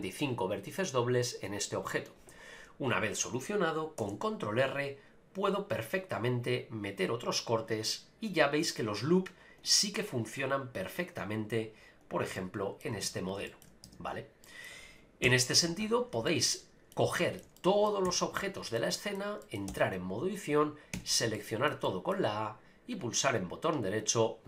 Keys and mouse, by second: 4.0 ctrl+r, 12.0 right click, 12.3 middle click, 13.0 ctrl+z, 13.5 shift+middle click, 13.8 Tab, 14.4 middle click, 16.3-16.9 middle drag, 17.1-17.4 shift+middle drag, 17.6 middle click, 18.1 a, 18.4-18.8 shift+middle drag, 18.9 middle click, 19.4 middle click, 19.8 Tab, 20.9 a, 21.3 shift+middle click, 21.8 middle click, 23.0-24.4 right drag.